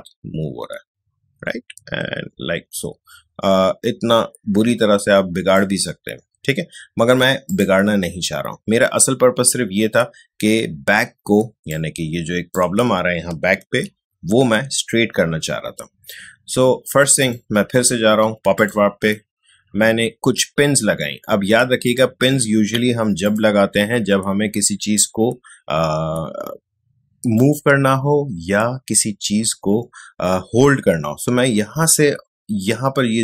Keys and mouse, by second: 11.7-13.7 drag, 13.7 ctrl+d, 17.1 click, 21.8 click, 27.3 click.